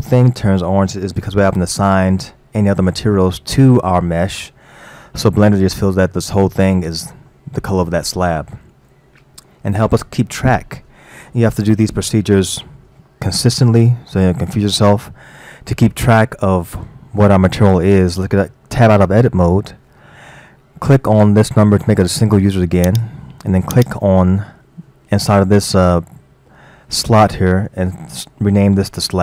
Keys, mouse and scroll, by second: 19.1 Tab, 22.9 click, 23.8-26.8 drag.